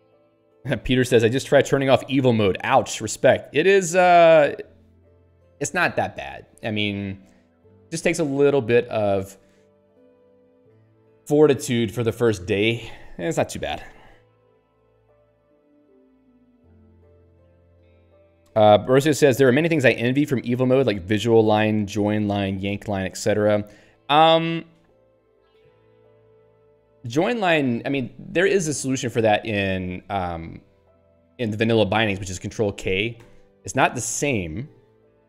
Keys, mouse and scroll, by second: 29.2 click, 33.2 ctrl+k.